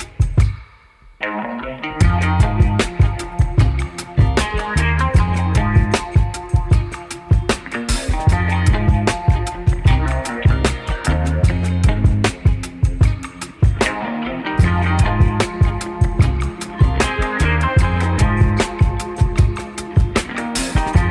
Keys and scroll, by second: 2.9 1, 5.4 2, 6.0 ctrl+r, 7.8 ctrl+r, 9.7 ctrl+c, 12.8 1, 14.1 alt+c, 17.1 ctrl+shift+w, 19.6 2.